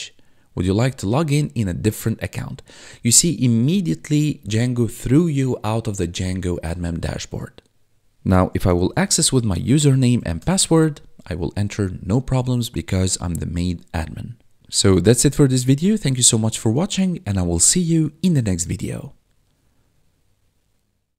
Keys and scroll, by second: 8.2-10.5 typing.